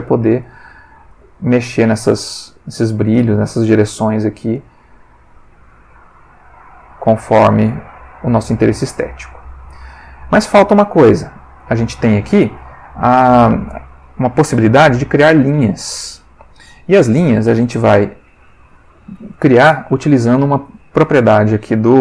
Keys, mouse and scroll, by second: 0.4 click, 1.1 click, 1.8-2.4 drag, 2.8 click, 3.8-11.9 drag, 12.6-13.6 middle drag, 17.6 ctrl+s, 18.6 Escape, 20.8 click.